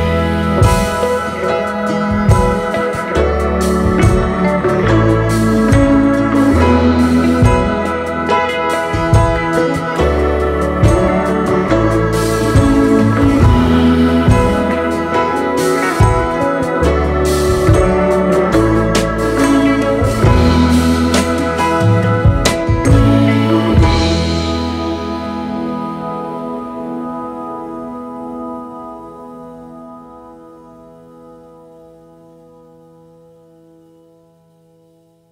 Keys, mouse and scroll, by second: 0.0 space, 0.7 alt+scroll down 2, 1.7-2.4 space, 3.9-4.2 alt+scroll up 1, 4.8 space, 9.4 shift+click, 12.4 shift+click, 12.9-13.8 space, 15.7 Delete, 19.6-22.5 typing, 28.1-29.7 alt+scroll up 4, 31.6 ctrl+t, 32.8 ctrl+a, 33.1 0, 33.4 Return.